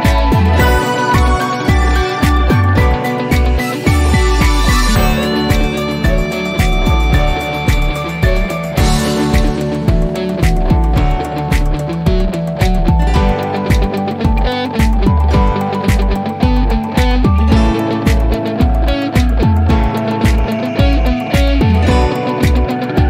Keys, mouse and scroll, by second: 5.7 click, 8.8 click, 11.3 F3, 14.0 click, 18.1 click, 20.2 click, 22.5 click.